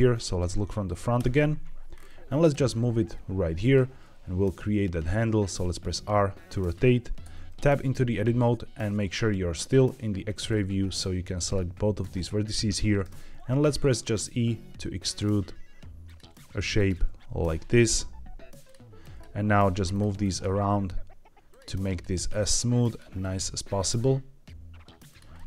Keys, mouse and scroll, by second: 1.1 KP_1, 1.9-2.4 scroll up 2, 2.4 g, 3.5 click, 3.8 r, 6.5 click, 7.1 Tab, 10.4-11.5 drag, 13.0 e, 13.9 click, 14.1 e, 15.0 click, 15.2 e, 16.0 click, 16.1 e, 16.7 click, 16.9 e, 18.6 click, 18.9 click, 19.3 g, 19.8 click, 20.1 click, 20.4 g, 21.4 click, 21.7 click, 22.0 g, 22.8 click, 23.1 click, 23.5 g, 25.0 click, 25.3 middle click.